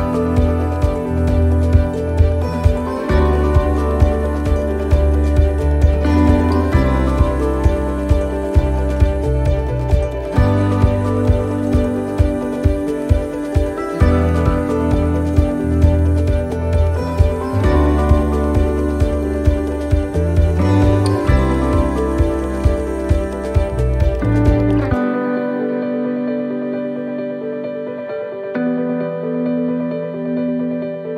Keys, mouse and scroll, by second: 14.4 click, 16.8 ctrl+shift+t.